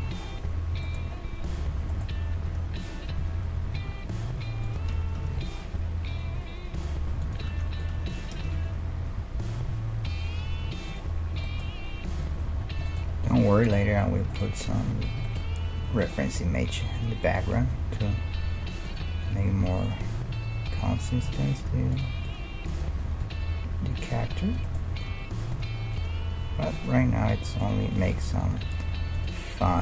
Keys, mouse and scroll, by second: 1.8-3.9 middle drag, 2.4 a, 3.2 a, 3.8 s, 4.9 g, 7.5 Tab, 7.8-9.8 right drag, 8.1 g, 11.2-13.3 middle drag, 12.2 a, 13.3-15.1 right drag, 14.7 Tab, 15.1-17.0 middle drag, 17.0-18.9 right drag, 17.6 g, 18.5 g, 19.2-24.7 right drag, 19.5 g, 21.0 g, 21.7 g, 22.4 g, 23.4 g, 24.7-26.5 middle drag, 25.0-29.8 right drag, 27.0 g, 28.2 g, 29.2 g.